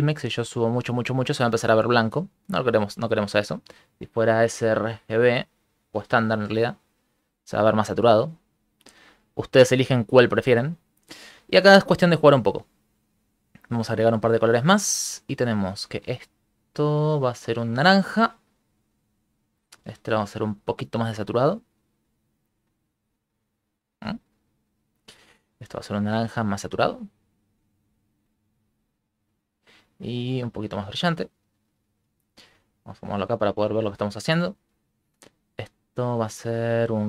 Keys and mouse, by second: 0.2 click, 4.4 click, 7.1 click, 10.3 shift+middle click, 11.9 shift+middle click, 13.5 click, 13.7 click, 14.2 click, 15.1 click, 16.4 click, 17.1 click, 17.6 click, 19.5 click, 20.0 click, 21.1 click, 24.5 click, 25.3 click, 26.1 click, 26.6 click, 28.6 click, 32.2 shift+middle click, 33.7 shift+middle click, 34.9 click, 35.4 click, 36.3 click, 36.8 click.